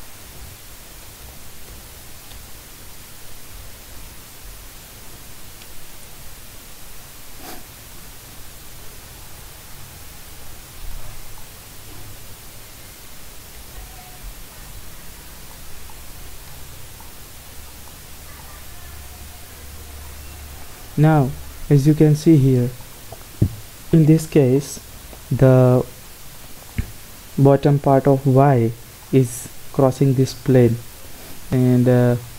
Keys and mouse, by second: 0.0-2.9 typing, 3.7 Tab, 4.9 r, 8.7 middle click, 9.7 KP_0, 13.7 g, 16.0 middle click, 19.1 s, 20.8-22.5 drag, 32.0 middle click.